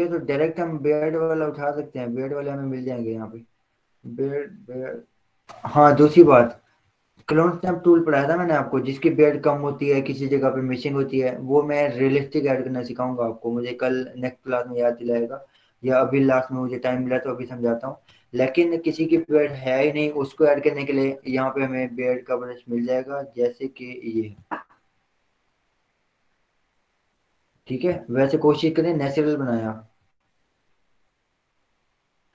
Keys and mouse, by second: 1.5 click, 4.1-7.2 drag, 18.8 click, 21.3-24.7 drag, 24.7 click, 28.8 click, 30.5 click.